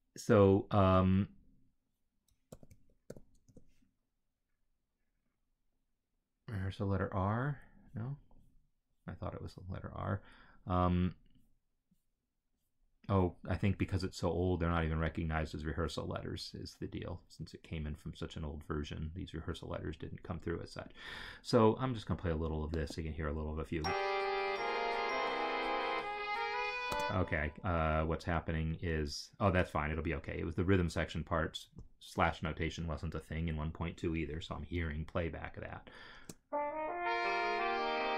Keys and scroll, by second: 2.6 ctrl+f, 3.0 r, 3.4 Return, 23.6 space, 26.9 space, 36.2 space.